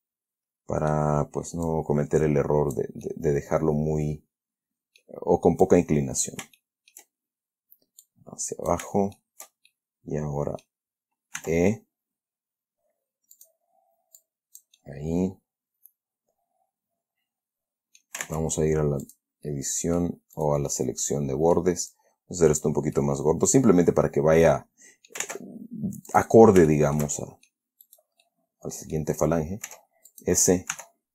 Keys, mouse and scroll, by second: 2.0-3.3 drag, 3.4-5.5 middle drag, 6.0 click, 6.9 shift+middle click, 8.3 click, 9.5 shift+middle click, 10.3 middle click, 11.7 e, 13.7 click, 14.5-18.5 drag, 18.5 ctrl+Tab, 19.4 click, 19.8 middle click, 20.7 right click, 21.0-22.1 middle drag, 22.2 click, 23.1-25.6 middle drag, 25.5 ctrl+Tab, 26.4 click, 27.0-28.0 shift+middle drag, 28.2 shift+right click, 28.6 shift+middle click, 29.2 click, 30.0 s, 30.4 click, 31.0 e.